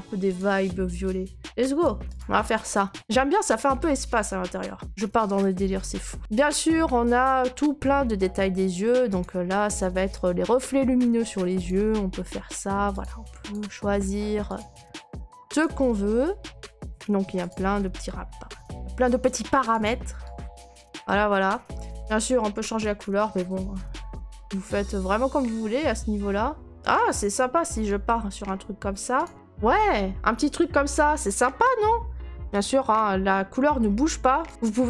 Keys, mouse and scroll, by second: 0.4 click, 1.8 click, 2.2 click, 2.6-3.5 scroll, 4.8 right click, 4.9 scroll, 5.4 right click, 6.2 right click, 6.2 click, 6.4 right click, 6.6-12.4 middle click, 6.7 scroll, 9.2 click, 11.7 click, 12.1 middle click, 13.0 click, 13.5 click, 13.8 middle click, 13.8 middle click, 13.9 middle click, 14.6 click, 14.8-15.6 scroll, 15.6 click, 16.2-16.8 scroll, 17.5 click, 17.8-18.2 scroll, 19.0 scroll, 19.7 click, 19.7-20.3 scroll, 20.6 right click, 21.1 right click, 22.2 scroll, 22.3 click, 26.7 click, 26.7 middle click, 27.1 right click, 28.1 right click, 29.2 click, 29.3 click, 29.8 right click, 30.0 middle click, 30.0 middle click, 30.1 middle click, 30.6 right click, 31.6 middle click, 32.6 click, 34.5 click, 34.5 middle click.